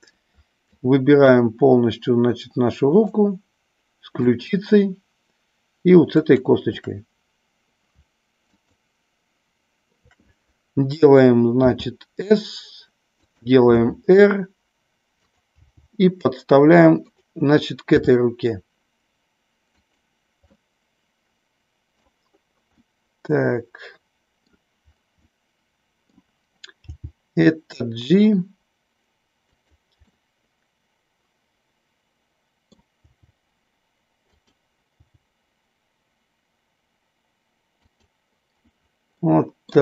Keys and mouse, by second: 0.8-1.4 shift+drag, 2.4-3.1 shift+drag, 4.1-5.1 shift+drag, 6.1-7.3 shift+drag, 11.6 s, 13.1 click, 13.8 r, 15.2 click, 15.6 g, 18.0 r, 19.6 click, 20.5-21.9 middle drag, 22.7-24.5 middle drag, 25.1-26.1 middle drag, 26.9 g, 29.4 click, 30.0-32.8 middle drag, 32.9 g, 34.4 click, 34.9 g, 37.9 click, 39.3 middle click.